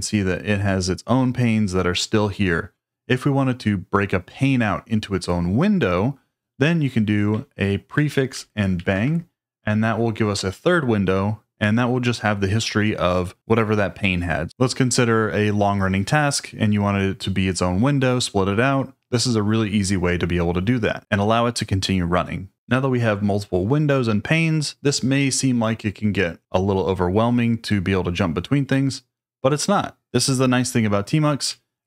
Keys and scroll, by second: 7.9 ctrl+a, 8.7 shift+1.